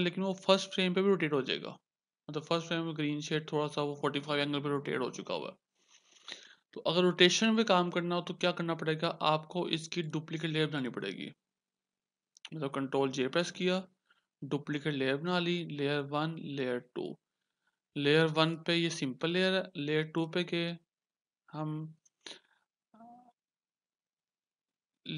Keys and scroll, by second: 0.6 Return, 13.5 ctrl+j.